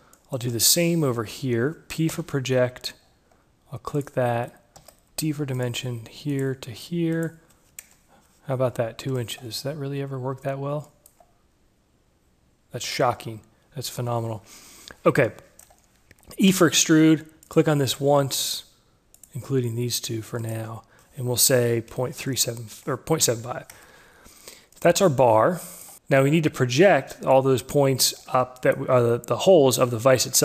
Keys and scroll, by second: 2.5 p, 5.1 d, 8.2 Return, 16.6 e, 22.0 Delete, 22.6 5, 24.0 Return.